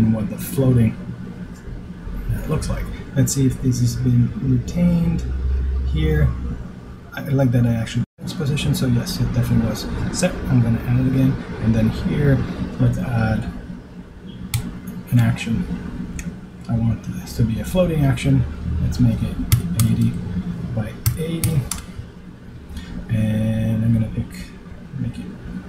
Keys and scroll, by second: 17.5 shift+r.